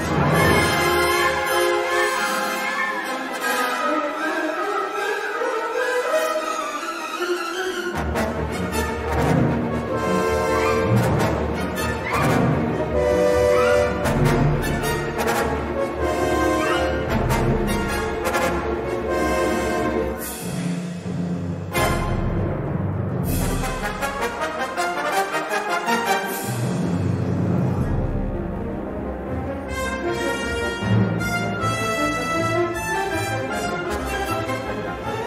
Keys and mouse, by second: 0.5 click, 0.8 3, 1.4 alt+shift+click, 2.7 g, 3.6 2, 4.7 alt+shift+click, 5.9 g, 7.3-8.4 middle drag, 8.6 3, 8.8 click, 9.6 i, 10.4 e, 12.1-13.3 middle drag, 16.4 shift+s, 18.7 shift+a, 21.5 middle click, 22.1 s, 24.2 g, 27.9 3, 28.3 s, 30.0 a.